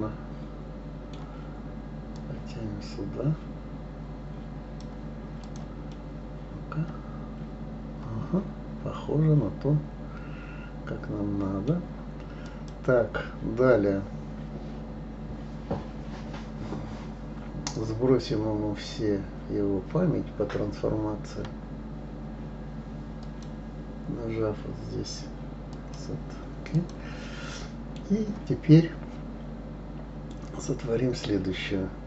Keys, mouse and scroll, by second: 2.1-5.1 drag, 5.4 click, 5.9-8.9 middle drag, 12.4 click, 23.2 click, 25.7-26.9 drag, 27.5-30.5 middle drag.